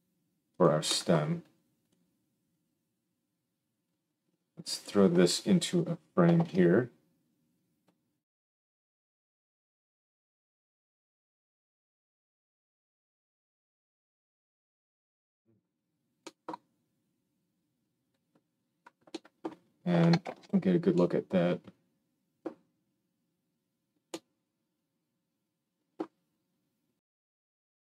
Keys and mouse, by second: 6.3 ctrl+j, 8.2 F2, 13.4 BackSpace, 20.2 ctrl+alt+space, 25.3-27.8 middle drag.